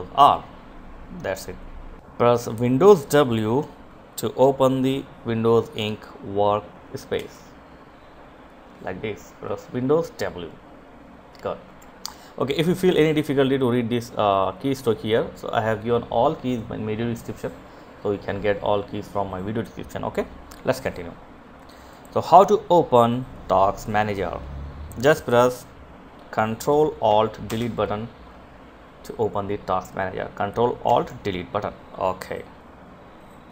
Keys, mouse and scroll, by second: 6.4 super+w, 11.0 Escape, 21.1 click, 26.7 ctrl+alt+Delete, 32.9 click.